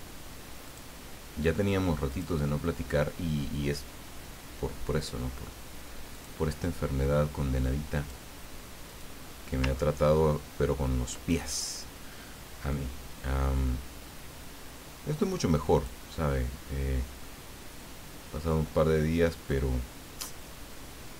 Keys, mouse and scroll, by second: 0.6 click, 2.1 click, 6.1 click, 7.9 click, 8.9 click, 9.9 ctrl+middle click, 10.5 ctrl+scroll up 2, 12.7-16.1 drag, 16.1-17.6 middle drag, 19.5-21.1 drag.